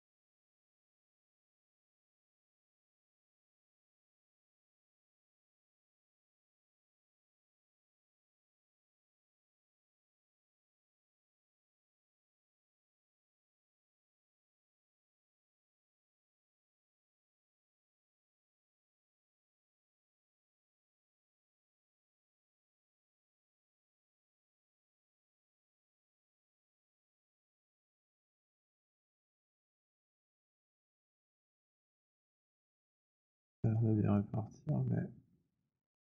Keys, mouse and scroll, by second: 1.2 click, 3.0 click, 7.0 click, 9.0 click, 10.8 click, 11.1 alt+click, 13.7 click, 16.4 click, 18.4 click, 23.0 click, 25.3 click, 27.4 click, 29.3 click, 31.5 click, 33.5 click, 36.0 click.